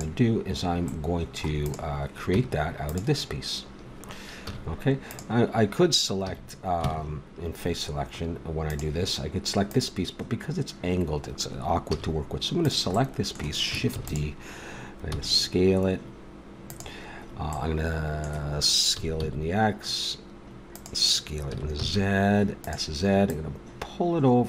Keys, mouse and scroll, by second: 1.1 middle click, 1.6-3.0 right drag, 2.3 Tab, 4.5 a, 5.0-6.2 right drag, 6.2 a, 8.7 click, 9.6 right click, 11.5 middle click, 11.9 a, 12.6 right click, 14.0 shift+d, 14.1 click, 15.1 s, 18.9 s, 21.5 s, 23.2-24.4 drag.